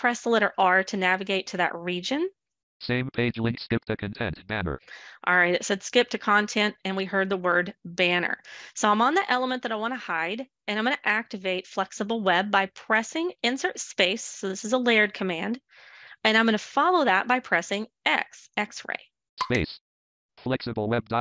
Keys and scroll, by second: 13.2 space, 16.1 x.